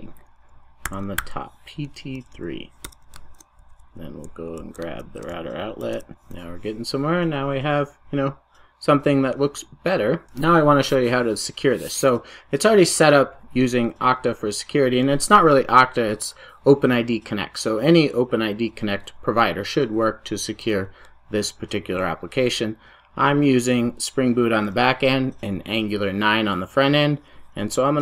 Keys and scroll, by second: 5.9 super+x, 6.0 super+s.